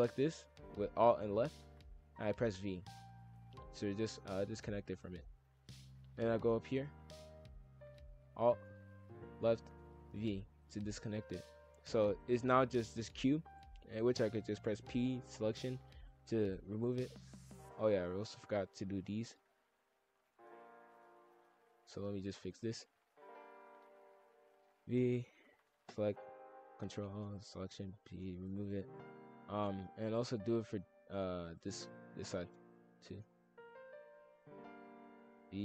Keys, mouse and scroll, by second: 2.2 v, 3.3-5.4 middle drag, 5.4 shift+f, 7.3 click, 7.6 alt+click, 10.1 v, 11.3 click, 12.1 ctrl+l, 12.4 g, 14.5 p, 16.4 click, 17.0 shift+f, 18.5 click, 19.8-20.8 drag, 21.8-23.3 drag, 23.7 alt+click, 24.6 v, 25.8 ctrl+l, 26.0 p, 28.1-28.8 drag, 28.8 shift+f, 30.4 click, 31.4 click, 31.8 click, 32.9-34.5 drag, 35.1 v.